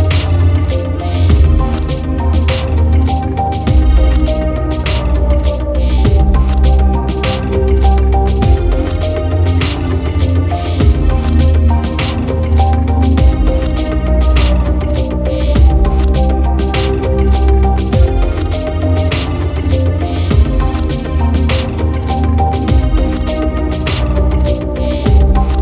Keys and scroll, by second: 10.4 ctrl+0.